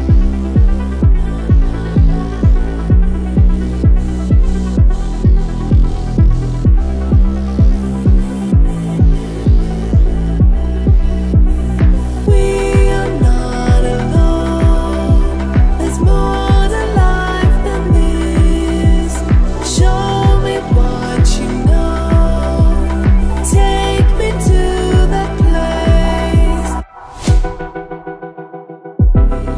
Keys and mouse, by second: 8.6-9.6 middle drag, 9.8 ctrl+middle click.